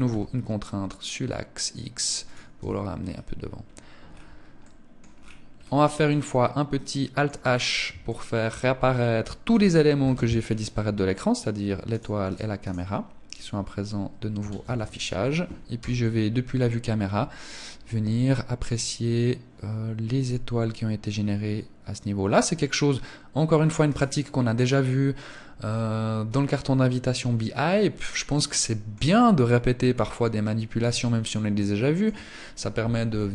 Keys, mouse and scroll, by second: 1.7 click, 1.9 Tab, 2.3 scroll down 1, 2.9-3.6 scroll down 8, 3.9 middle click, 4.3 scroll up 1, 4.5-5.1 scroll down 2, 5.4 middle click, 6.7 scroll down 2, 7.3 shift+middle click, 9.3 alt+h, 9.7 scroll up 1, 10.9 scroll up 4, 11.2 right click, 11.6 right click, 11.9 right click, 12.6 right click, 13.2 middle click, 13.9 ctrl+s, 15.1 KP_0, 23.2 right click, 27.0 middle click, 28.5 middle click, 29.5-29.9 scroll up 3, 30.3 shift+middle click.